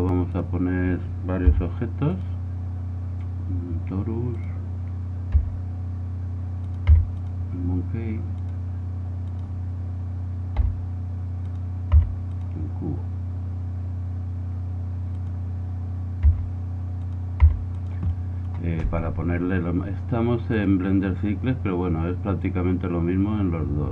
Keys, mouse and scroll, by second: 0.3-6.1 drag, 1.5 s, 5.4 s, 7.2 g, 8.3-11.1 drag, 10.6 s, 11.5-13.2 drag, 11.9 g, 15.1-16.9 drag, 16.3 s, 17.1-23.9 drag, 17.4 g, 19.5 middle click.